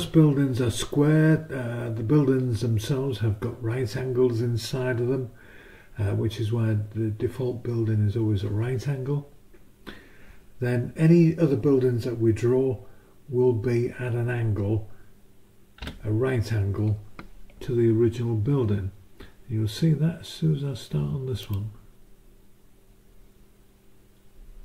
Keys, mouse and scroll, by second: 15.8 b, 21.4 click.